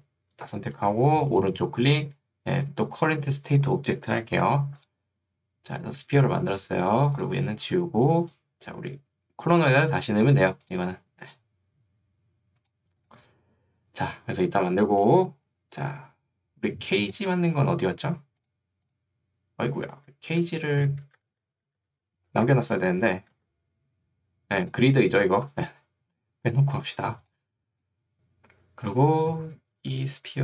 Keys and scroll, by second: 19.9 ctrl+z, 20.9 ctrl+z, 23.3 ctrl+z.